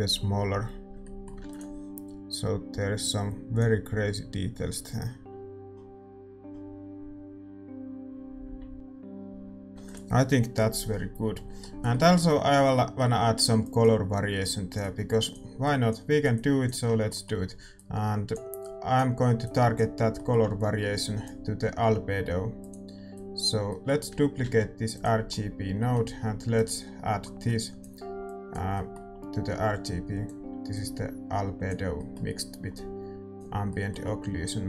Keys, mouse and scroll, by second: 1.2-2.6 middle drag, 2.6 ctrl+s, 3.1-5.7 drag, 5.8 middle click, 8.0 middle click, 9.5 ctrl+s, 9.9 ctrl+s, 12.0-34.6 middle drag, 18.6-34.6 drag.